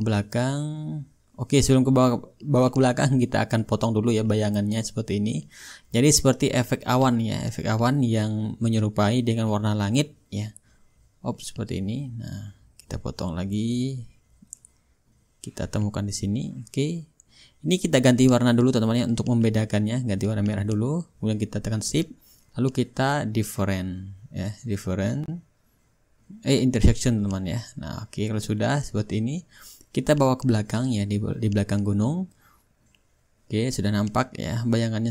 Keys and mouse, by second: 1.8-3.5 drag, 3.5-6.6 drag, 6.7-7.8 drag, 8.1-13.3 drag, 13.4-16.5 drag, 16.8-17.9 drag, 18.6-21.7 drag, 26.4-27.6 shift+drag, 26.4-27.6 shift+right drag, 28.4-31.6 drag, 31.6-33.7 shift+right drag, 33.7-34.9 middle drag.